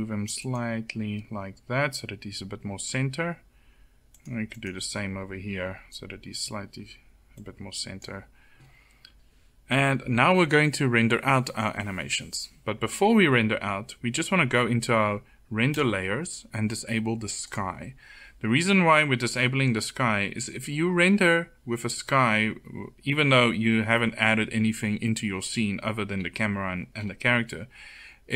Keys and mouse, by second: 1.8-3.6 middle drag, 3.6-5.9 drag, 6.8-22.6 drag, 25.6 KP_7.